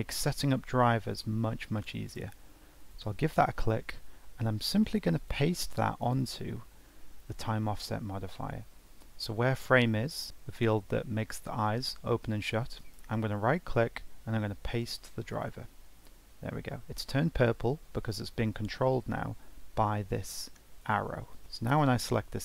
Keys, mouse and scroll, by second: 4.6-9.0 drag, 10.0-11.1 drag, 11.1 ctrl+z, 12.8-15.8 right drag, 20.8-21.8 drag.